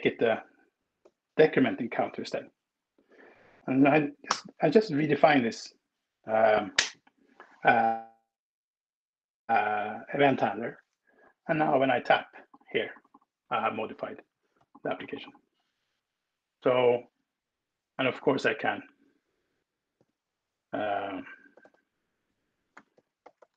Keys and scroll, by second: 2.0 Escape, 22.2-23.0 typing.